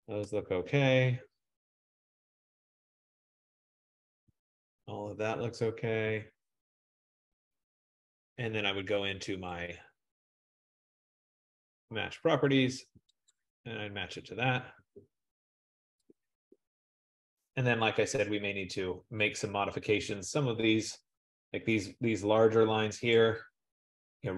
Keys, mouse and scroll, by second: 0.7-1.5 scroll, 1.9-2.6 scroll, 2.7-3.5 scroll, 4.3-5.1 scroll, 6.6-8.3 scroll, 10.7 click, 11.4 click, 13.4 click, 16.3 click, 17.6 click, 18.1-21.1 scroll, 21.4 scroll, 23.2 click.